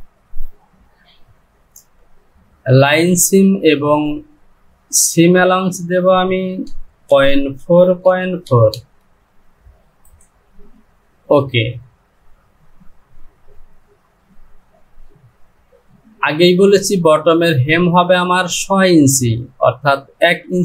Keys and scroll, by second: 6.6 Down, 8.8 Down.